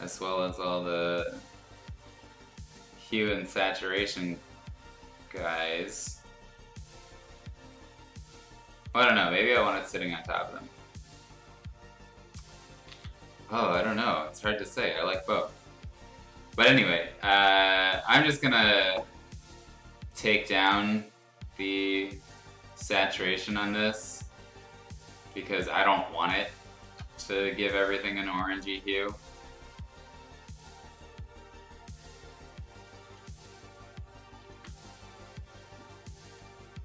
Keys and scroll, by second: 12.9 ctrl+z, 18.0 ctrl+u, 34.4 ctrl+z.